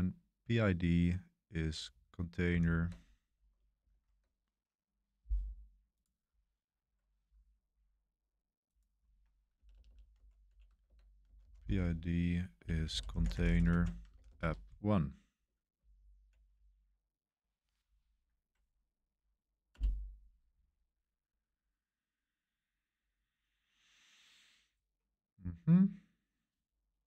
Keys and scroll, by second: 2.5 super+3, 3.9 super+1, 4.1 super+3, 9.2-14.8 typing, 15.9 Right, 16.5 Left, 17.0 Left, 17.1-17.9 typing, 17.4 Left, 19.7 Return.